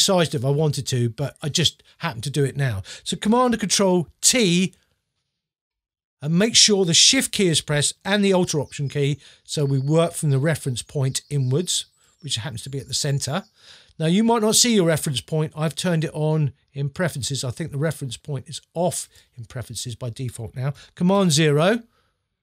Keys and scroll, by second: 4.3 super+t, 21.1 super+0.